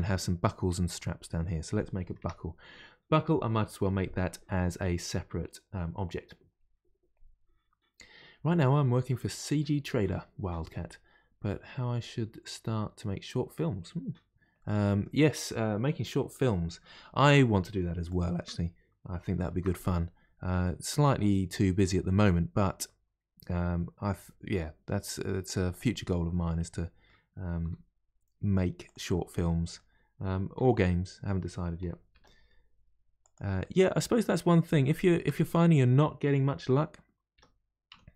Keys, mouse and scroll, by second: 1.4 middle click, 2.2 Tab, 14.6-16.7 middle drag, 16.7 KP_1, 18.1-19.5 shift+right drag, 19.5 shift+a, 26.5-27.6 middle drag, 27.6 s, 29.1-30.6 middle drag, 30.6 s, 33.6-37.3 middle drag, 37.3 r.